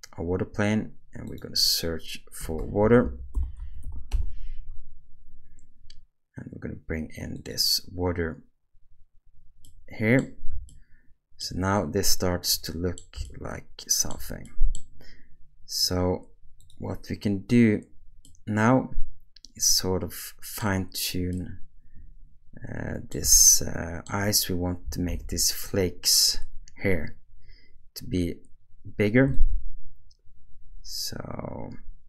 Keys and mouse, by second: 1.2-4.2 drag, 2.6 BackSpace, 9.6 middle click, 10.7-11.4 shift+middle drag, 12.7 middle click, 13.2-14.1 shift+middle drag, 13.4-14.1 shift+drag, 14.4 middle click, 18.2-20.6 middle drag, 21.4-23.1 middle drag, 23.4-24.1 shift+middle drag, 25.1 alt+a, 29.4-32.0 shift+drag.